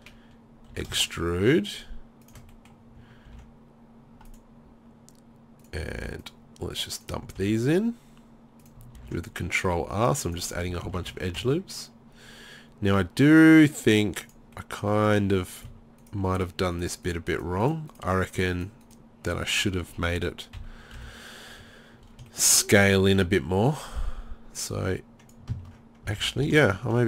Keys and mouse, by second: 0.7 e, 2.3-3.3 drag, 3.3 ctrl+r, 6.0 ctrl+r, 7.4 ctrl+r, 9.0 ctrl+r, 10.7 z, 10.9 z, 11.1 Tab, 11.4 Tab, 15.6 right click, 20.6 KP_3, 21.0 KP_1, 24.6 click, 26.2 ctrl+z.